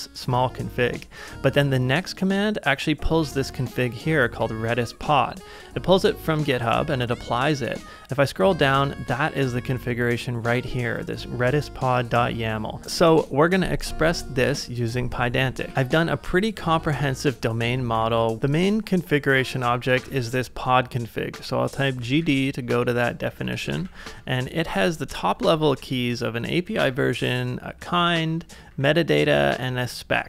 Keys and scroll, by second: 15.6 super+Tab, 18.0-20.1 typing, 18.4 ctrl+w, 21.7-23.9 typing, 25.7 ctrl+c, 25.8-30.2 typing, 26.5 ctrl+c.